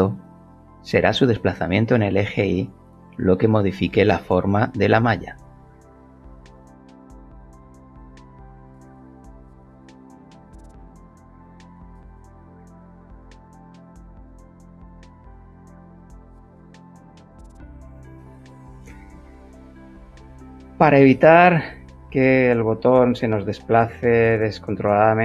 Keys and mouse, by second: 0.5 click, 3.0 click, 9.7 click, 11.1 g, 14.6 Escape, 15.4 g, 15.6 y, 19.1 Escape, 20.6 g, 24.8 Escape.